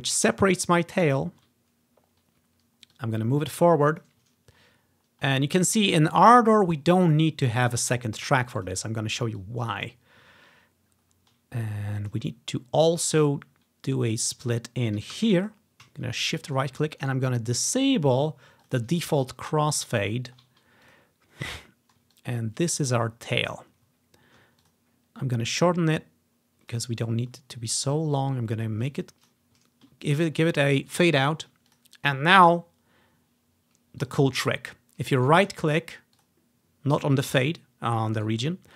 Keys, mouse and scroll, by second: 0.8 ctrl+scroll up 2, 1.2-1.6 ctrl+scroll down 1, 3.0-5.4 drag, 6.4 click, 7.4-7.9 scroll up 2, 8.0 scroll down 1, 8.7 click, 9.1 ctrl+scroll up 1, 9.5 click, 10.4 ctrl+scroll up 1, 11.1 scroll up 1, 12.1 click, 12.3-13.4 drag, 15.3 s, 15.5-17.0 drag, 16.3 shift+middle click, 16.3 shift+right click, 17.1-18.4 right drag, 18.4 click, 18.7 click, 19.5-20.6 ctrl+scroll down 1, 19.7 click, 21.0-23.7 drag, 21.7 scroll down 1, 24.0-28.0 ctrl+drag, 24.1-25.5 ctrl+scroll down 1, 25.5 scroll up 1, 27.1-28.3 scroll up 1, 28.3-29.4 ctrl+drag, 29.8-30.3 ctrl+scroll up 1, 30.3 ctrl+scroll down 1, 30.5 click, 31.8-33.2 drag, 34.2-36.0 drag, 35.3-36.7 right drag, 36.3-38.2 drag, 38.3 right click.